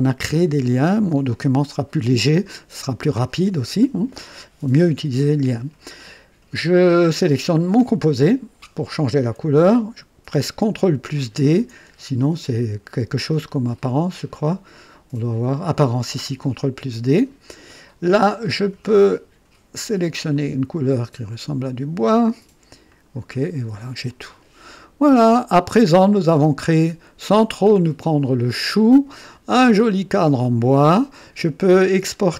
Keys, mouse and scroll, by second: 7.5 click, 13.7 ctrl+right click, 16.5 click, 18.8 click, 20.3 click, 21.6 click, 22.9 click, 23.4 click, 24.1-26.7 drag, 26.9 scroll up 1, 27.5 scroll down 1, 27.9 right click, 30.1-31.6 drag.